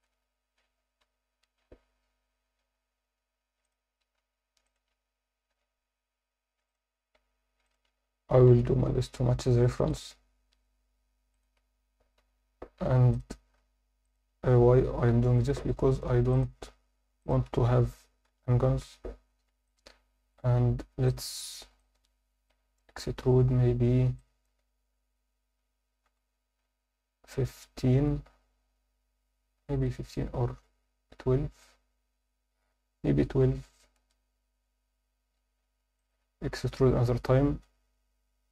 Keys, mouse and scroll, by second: 1.0 j, 3.6 click, 4.6 shift+click, 5.5 j, 6.7 click, 7.6 shift+click, 8.5 j, 9.8 click, 11.3 shift+click, 12.2 j, 13.1 click, 14.0 shift+click, 15.1 j, 16.3 click, 17.2 shift+click, 18.3 j, 19.0 Tab, 19.3 Tab, 19.7 alt+middle click, 20.6 a, 21.1 shift+middle click, 21.8 ctrl+middle click, 24.2 ctrl+alt+shift+middle click, 26.1 e, 36.0 click.